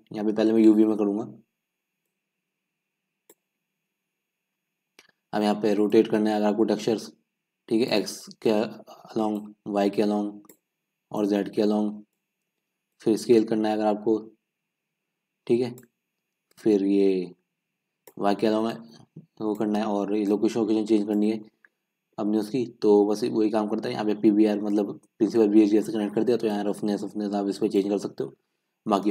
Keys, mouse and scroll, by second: 3.4-29.1 drag.